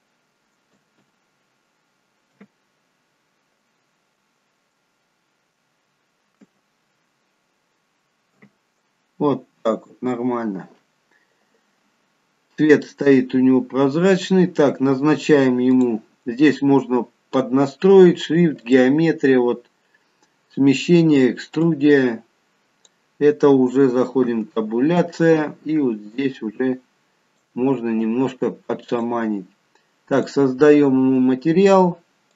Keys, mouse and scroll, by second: 0.8 space, 2.3 t, 8.3 shift+t, 12.3-12.7 scroll up 2, 12.7-13.6 scroll down 1, 15.8 click, 16.6-17.3 scroll down 1, 17.3-18.5 scroll down 1, 18.6 click, 21.7 click, 24.2 Tab, 26.1 click, 30.2 click.